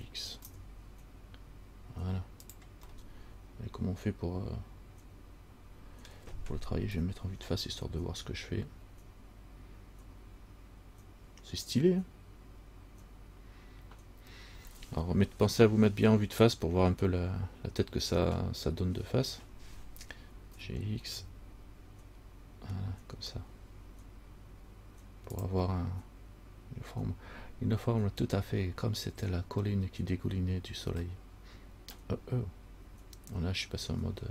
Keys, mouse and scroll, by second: 3.1 middle click, 7.0 KP_1, 8.5-9.5 scroll up 3, 20.7 g.